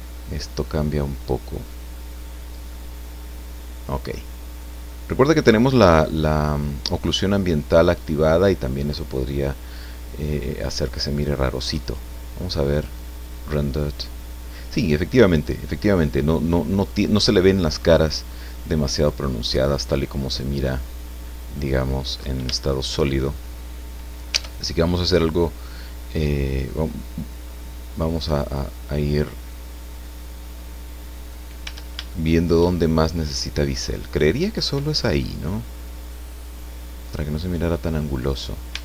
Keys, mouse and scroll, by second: 0.2-0.5 scroll down 2, 0.6-1.9 drag, 2.7-4.8 drag, 7.7-8.0 scroll down 2, 8.3-10.3 drag, 10.4-10.8 scroll up 1, 11.8 click, 12.7 click, 19.0 click, 21.6 click, 22.5 shift+middle click, 23.2-23.6 shift+scroll up 1, 24.4 Tab, 25.0-25.7 scroll up 4, 25.7-27.4 scroll down 2, 27.4-31.5 drag, 31.7 Tab, 32.1 shift+middle click, 32.3 shift+click, 33.1-35.1 middle drag, 35.2-38.7 drag, 38.7 middle click, 38.7 Tab.